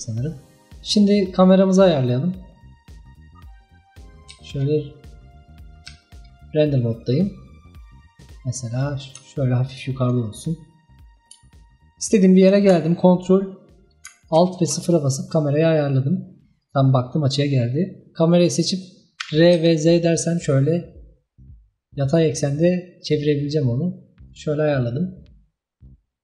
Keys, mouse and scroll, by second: 0.4-1.2 scroll down 2, 1.7-3.4 drag, 3.4 scroll down 2, 3.7-4.1 middle drag, 4.1 scroll up 2, 4.3 z, 5.1-5.5 scroll up 2, 5.5-5.9 middle drag, 5.9 z, 6.9-7.2 scroll down 1, 7.2-8.5 middle drag, 8.5 scroll up 2, 8.9-14.4 middle drag, 14.4 ctrl+alt+KP_0, 16.7 click, 19.3 r.